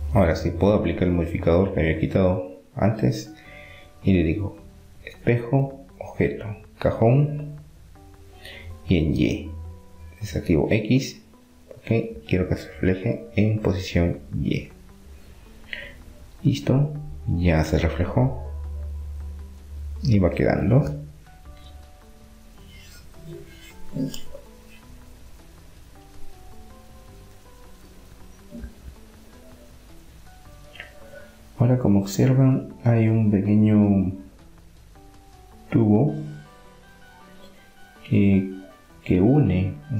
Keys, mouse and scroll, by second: 0.0 middle click, 0.6-2.3 drag, 2.3 middle click, 4.7-7.6 drag, 9.6-12.3 drag, 12.3-13.3 middle drag, 15.8-17.6 middle drag, 22.6-24.3 middle drag, 25.8-27.7 drag, 27.7-29.1 middle drag, 29.2 Tab, 29.5-31.1 middle drag, 30.2 Tab, 32.8 middle click, 35.0 Tab, 36.9 Tab, 37.3-39.2 drag, 39.2 middle click, 39.3 KP_1.